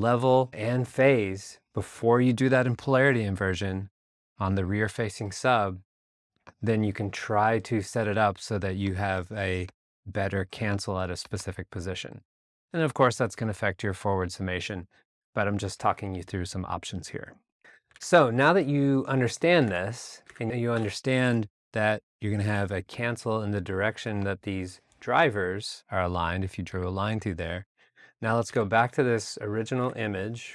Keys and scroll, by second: 17.5 super+Tab, 20.7 alt+BackSpace, 21.2 a, 26.7 alt+Tab, 28.5 super+Tab, 29.8 super+Tab.